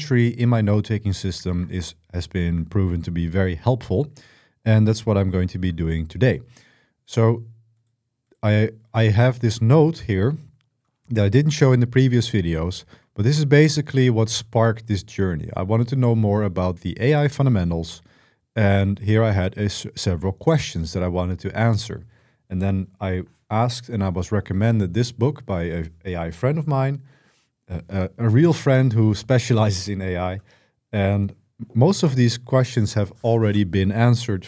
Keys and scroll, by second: 12.2-14.1 typing, 17.3-20.3 typing.